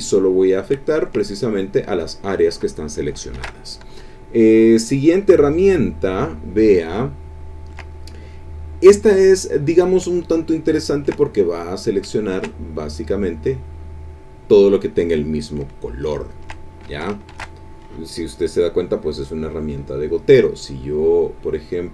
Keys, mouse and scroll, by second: 0.9 ctrl+click, 3.3 ctrl+shift+a, 4.8 click, 5.9-7.7 ctrl+drag, 10.1-11.2 ctrl+drag, 11.2 ctrl+click, 12.2 ctrl+click, 15.7 ctrl+click, 17.3 ctrl+shift+a, 19.8 click.